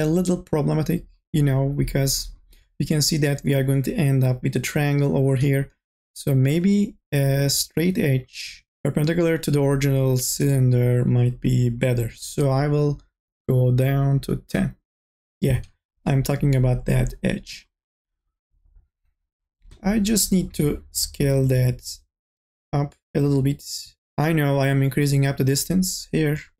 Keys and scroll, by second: 20.5 t.